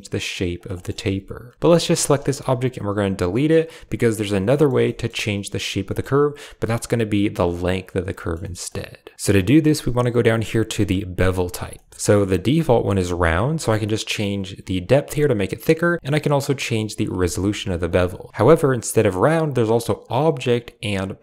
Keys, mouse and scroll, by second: 0.6 shift+click, 0.9 Tab, 1.5 x, 1.7 g, 3.3 Delete, 3.9-4.6 drag, 4.7 shift+drag, 5.1-5.4 drag, 5.7 shift+drag, 8.1 shift+drag, 8.3 click, 8.6 right click, 9.1 click, 11.6 shift+drag, 13.6-15.3 shift+drag, 15.8 click, 16.3 shift+click, 17.8 shift+click, 19.9 click, 21.1 click.